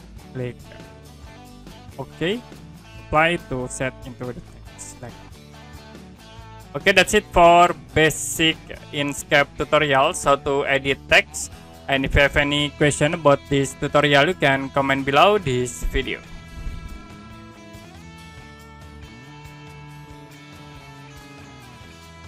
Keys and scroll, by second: 16.6 Print.